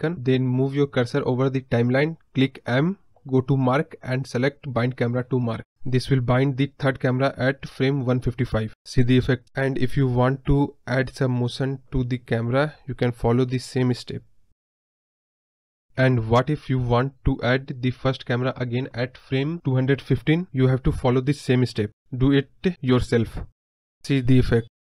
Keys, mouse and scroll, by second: 1.4 m, 2.5-5.2 drag, 5.2 space, 5.9 space, 7.3-13.1 drag, 16.4 click, 18.4-19.5 drag, 21.1 click.